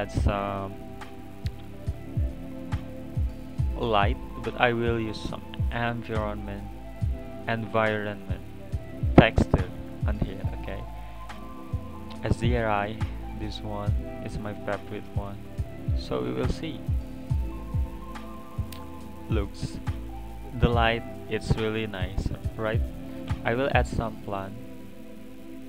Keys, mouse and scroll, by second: 2.3 click, 3.7-6.7 drag, 8.9-11.9 drag, 16.0 click, 17.4 click, 22.0 click, 23.4 shift+a.